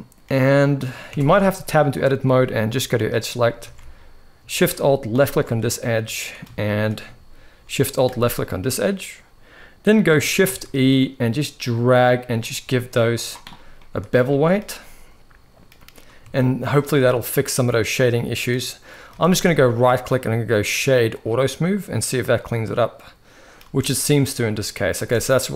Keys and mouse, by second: 0.2-0.7 middle drag, 0.8 Tab, 1.2 shift+middle click, 2.7 click, 3.4 alt+a, 5.4 middle click, 6.3 shift+middle click, 7.8 alt+shift+click, 10.2 shift+e, 13.5 drag, 13.6 middle click, 14.1-16.0 shift+middle drag, 16.0 Tab, 16.6-18.1 middle drag, 18.6 middle drag, 18.9 shift+middle drag, 19.7-21.0 right drag, 21.7-23.3 middle drag, 23.3 space, 24.6 space, 25.0-25.5 middle drag.